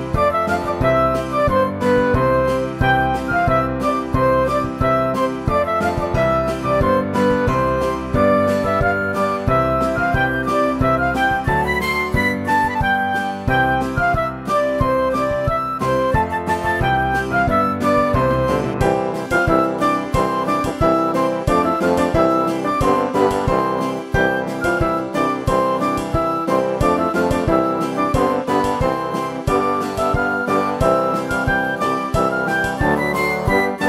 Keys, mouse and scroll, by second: 1.1 Tab, 1.7 click, 4.5-5.6 drag, 5.6 shift+a, 7.2 s, 9.7 KP_1, 10.2 click, 11.1 g, 13.5 click, 14.7 click, 15.3 n, 15.8 click, 16.3 click, 16.7 n, 17.6-20.1 drag, 20.7 click, 22.2 click, 22.6 Tab, 23.2 click, 23.8 click, 24.6 KP_7, 25.1 click, 26.4 click, 27.1 shift+click, 28.6 click, 29.6 e, 31.2 click, 31.5 click, 32.0 Tab, 32.2 click, 33.2 click.